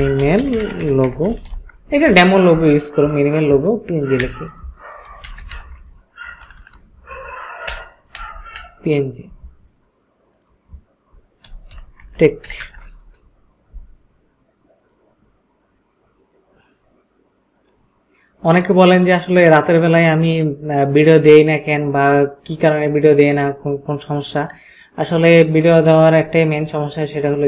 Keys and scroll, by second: 0.0-2.0 typing, 4.2-9.1 typing, 11.2-13.0 typing.